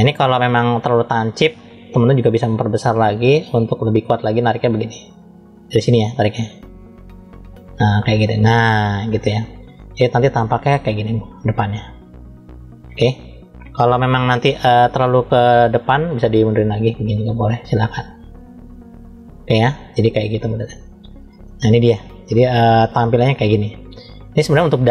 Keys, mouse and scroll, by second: 0.9 ctrl+z, 2.3 f, 6.5 click, 9.6-12.9 middle drag, 13.8 KP_3, 15.7 click, 21.3 middle click, 22.7-24.2 middle drag.